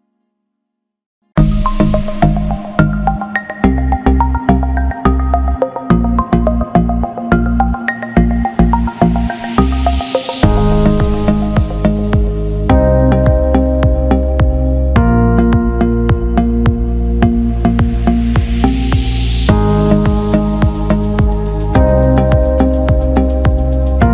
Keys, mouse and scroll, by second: 1.8 click, 3.0 click, 4.2-6.5 drag, 11.9 click, 12.7 Tab, 13.7 alt+shift+click, 16.5 alt+shift+click, 17.7 click, 22.5 shift+d.